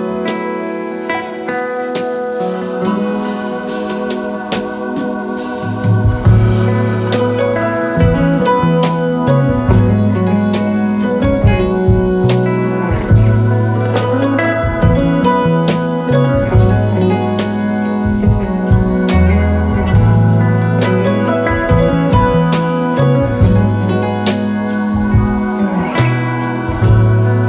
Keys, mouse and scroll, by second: 0.7-2.1 drag, 2.1 middle click, 2.8-4.7 drag, 4.7-5.3 scroll down 3, 5.3-6.8 middle drag, 6.8-8.3 drag, 8.3-8.9 scroll down 4, 8.9-9.7 drag, 10.4-14.2 drag, 14.2-15.2 middle drag, 15.2 click, 16.0-16.5 scroll down 2, 16.5 scroll down 1, 16.6-17.9 drag, 18.4-20.5 scroll down 7, 20.5-21.9 drag, 21.9-24.7 middle drag, 21.9-23.7 scroll down 5, 23.7-24.7 scroll down 1, 24.7-27.4 drag.